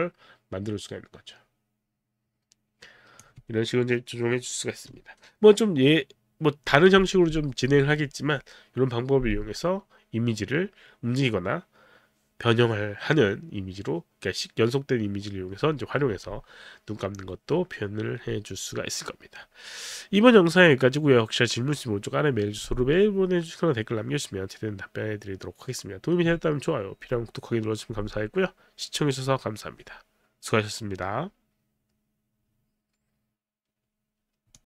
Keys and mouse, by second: 34.5 click.